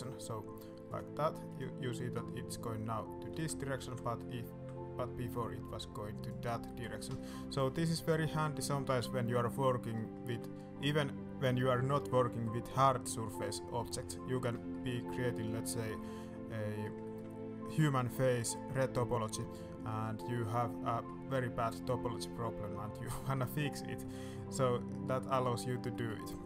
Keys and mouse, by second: 2.0 click, 3.2 ctrl+z, 4.0 ctrl+z, 4.1-6.3 ctrl+middle drag, 4.4 ctrl+r, 6.6 middle click, 7.1 shift+middle click, 8.2 middle click, 8.8 shift+middle click, 9.4 middle click, 10.3 middle click, 11.6 middle click, 13.0 middle click, 13.7 middle click, 14.5 middle click, 15.1 middle click, 15.6 middle click, 15.9 shift+middle click, 16.4 middle click, 17.0 shift+middle click, 18.3 middle click, 19.8 middle click, 20.8 middle click, 21.5-23.2 middle drag, 23.9 middle click, 24.7-25.0 middle drag, 25.8 middle drag.